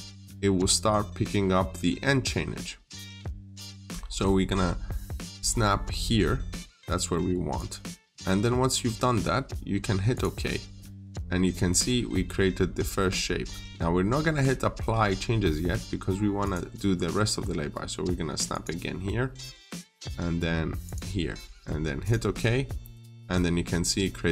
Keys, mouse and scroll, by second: 5.0-7.4 scroll up 1, 7.4 click.